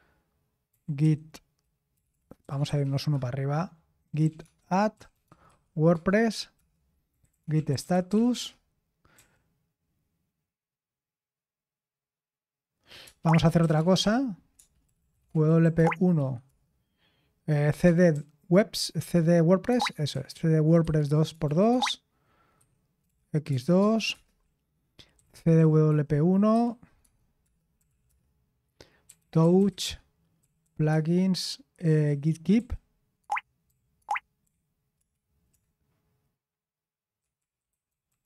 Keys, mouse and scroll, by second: 0.0-9.1 typing, 13.0-36.0 typing, 37.4-38.2 typing.